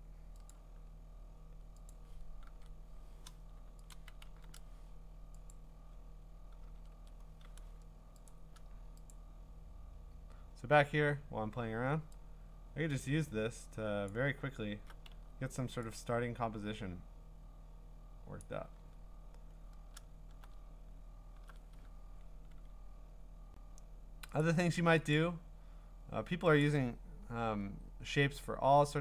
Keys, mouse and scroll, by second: 0.5 click, 2.5 ctrl+Tab, 3.9 click, 4.3 ctrl+w, 5.5 click, 6.6 ctrl+Tab, 8.3 click, 9.1 click, 10.0-11.0 scroll, 14.1 click, 14.7-15.1 scroll, 15.1 x, 18.4 click, 18.9-20.5 scroll, 20.5-21.5 scroll, 22.2-23.1 scroll, 23.3 scroll, 24.4 click, 25.1 click, 25.7 scroll, 25.8 scroll up 4, 26.6 click, 26.9 scroll down 2, 27.5-27.8 scroll down 3, 27.9-29.0 scroll.